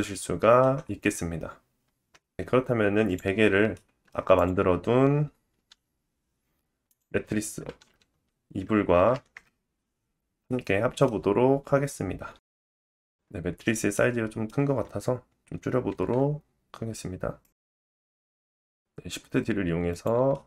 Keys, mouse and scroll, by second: 0.8-1.1 scroll down 2, 1.8-3.0 scroll down 2, 3.1-4.3 drag, 3.7 middle click, 4.4-6.9 drag, 5.5 r, 6.9 middle click, 7.6 r, 10.4-12.8 middle drag, 12.6 s, 13.2 shift+middle click, 13.2 g, 13.7 g, 14.0 middle click, 14.2 scroll down 1, 14.6 click, 14.6-17.1 middle drag, 14.7 scroll up 3, 15.5 s, 16.1 g, 17.1 click, 17.2-19.9 middle drag, 17.2 g, 18.5 shift+d, 19.9 click.